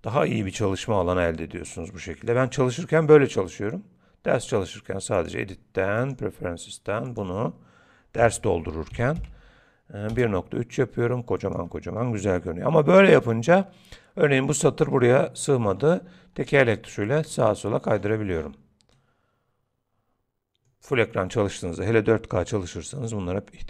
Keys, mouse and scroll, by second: 0.4-0.8 scroll up 2, 1.0 shift+middle click, 5.2 click, 15.1-15.7 scroll down 4, 15.7 scroll up 2, 16.4 scroll down 1, 16.5-16.9 scroll down 1, 17.1-18.3 scroll down 13, 17.9-18.6 scroll up 8, 18.9 middle click, 18.9 scroll up 3.